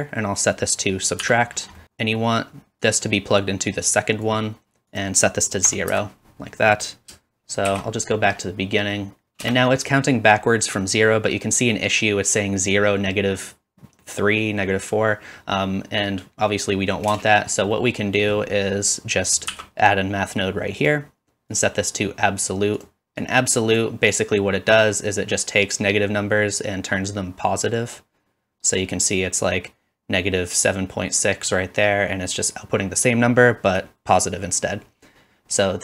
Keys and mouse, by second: 0.8 click, 0.8 middle click, 0.8 right click, 1.2-1.6 drag, 1.2-1.6 middle drag, 1.2-1.6 right drag, 7.7 shift+Left, 9.2-12.0 middle drag, 9.4 space, 17.1 space, 18.1-35.8 drag, 19.6 shift+d.